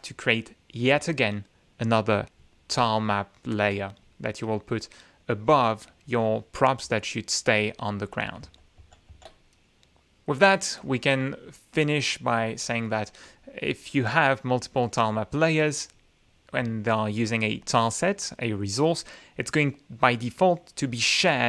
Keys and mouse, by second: 4.9 click, 8.9 ctrl+z, 11.3 click, 13.7 click, 14.1 click, 14.6 click, 15.0-15.5 drag.